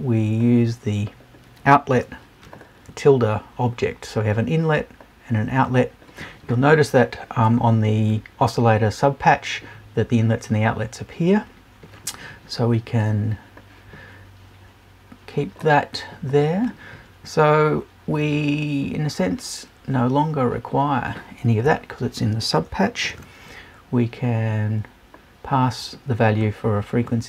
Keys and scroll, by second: 21.7 BackSpace, 22.6 super+BackSpace.